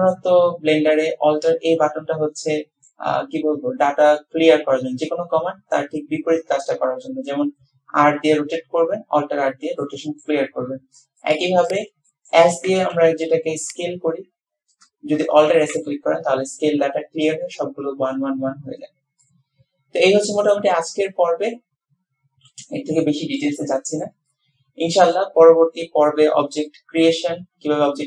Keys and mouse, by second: 9.8-10.3 drag, 11.2 click, 11.7 click, 12.1-12.4 shift+drag, 12.7 s, 15.7 alt+s, 19.3-20.1 drag, 20.1-23.5 middle drag, 23.9 shift+middle click, 24.3-25.3 middle drag.